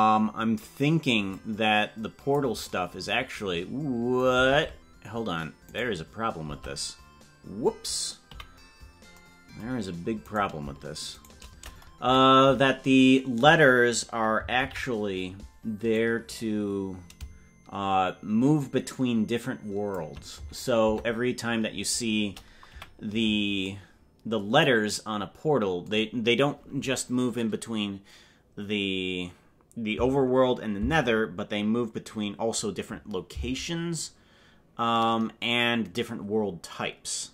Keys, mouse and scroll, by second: 1.3-2.4 drag, 4.6 ctrl+Tab, 5.8-6.5 right drag, 6.5 Tab, 8.2 KP_Decimal, 10.3 right click, 11.1 shift+right click, 12.0 KP_Decimal, 14.6 ctrl+l, 15.9-20.0 drag, 20.9 Tab, 22.7 KP_Decimal.